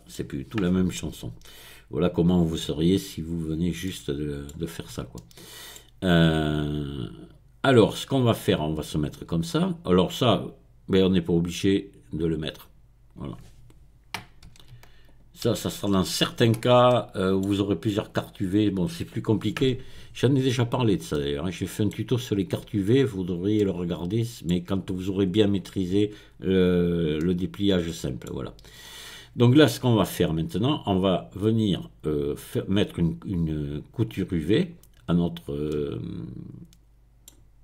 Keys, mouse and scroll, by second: 1.5-2.6 scroll down 1, 2.6 scroll down 1, 3.2-3.8 scroll up 1, 3.8-5.9 middle drag, 11.7 click, 13.1 click, 14.5 x, 15.5 x, 16.4-16.9 scroll down 1, 16.9 middle click, 20.1-20.7 scroll up 1, 20.7-21.1 scroll down 1, 21.1-23.0 middle drag, 23.0-23.5 scroll up 1, 23.5-24.8 middle drag, 27.2-28.5 middle drag, 34.1-35.1 drag, 35.2-35.7 scroll up 1, 35.7-37.6 middle drag.